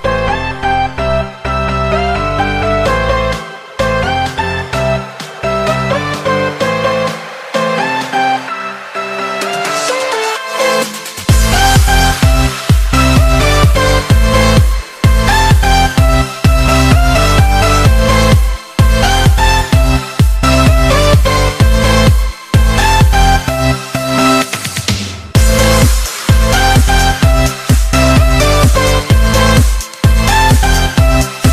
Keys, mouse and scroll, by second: 0.7 shift+click, 1.9 ctrl+j, 3.6 click, 4.3 click, 5.3-8.9 drag, 9.4-11.6 drag, 12.2 click, 12.6-13.0 scroll up 1, 13.0 shift+middle click, 13.5-15.0 scroll up 6, 15.0 Tab, 17.6 Tab, 18.1-19.2 scroll down 7, 19.3 click, 20.3 click, 21.9 click, 24.1 click, 24.9-25.7 scroll up 9, 25.7 shift+middle click, 26.1-28.6 shift+scroll up 6, 28.6-31.5 drag.